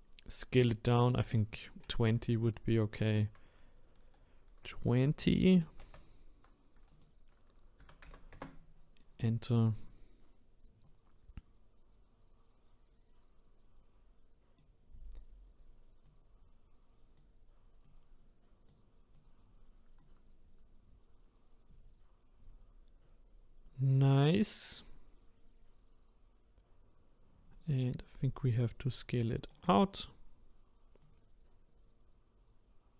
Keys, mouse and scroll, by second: 5.6 KP_2, 6.9-9.9 drag, 10.8-13.8 drag, 16.0-22.3 drag, 27.7-30.8 shift+right drag, 31.0-32.9 drag.